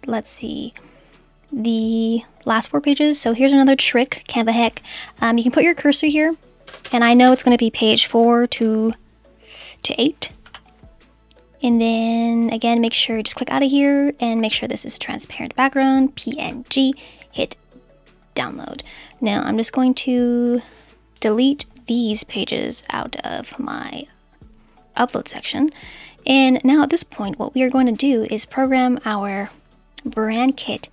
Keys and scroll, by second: 6.6 BackSpace, 8.1 4, 8.5 -, 10.4 8.